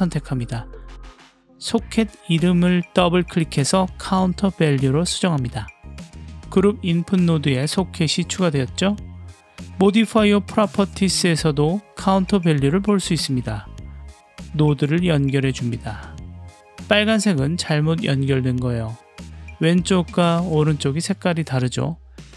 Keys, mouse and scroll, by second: 2.7 click, 2.9-5.9 drag, 7.1-7.7 drag, 14.5 click, 15.4-16.2 drag.